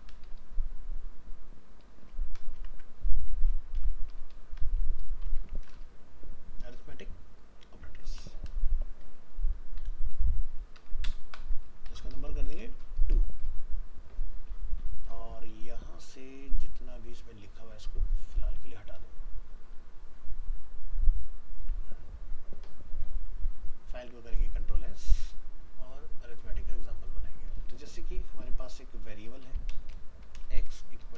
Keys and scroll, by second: 23.3 ctrl+s, 28.0 ctrl+Home.